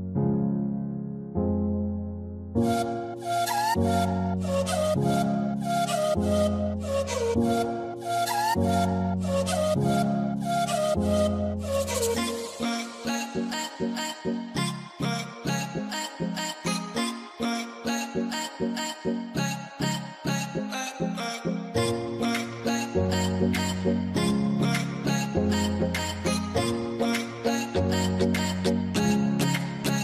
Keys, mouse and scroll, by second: 0.4-0.9 scroll down 1, 1.0 alt+middle click, 1.8 right click, 2.9 scroll down 1, 4.4 ctrl+click, 5.0 middle click, 5.8 ctrl+click, 6.5 right click, 8.3 scroll down 1, 8.7 alt+middle click, 9.6 alt+w, 9.7 scroll up 1, 15.6 scroll up 1, 18.6 scroll down 1, 18.7 F10, 24.0 double click, 28.1-28.8 scroll down 1.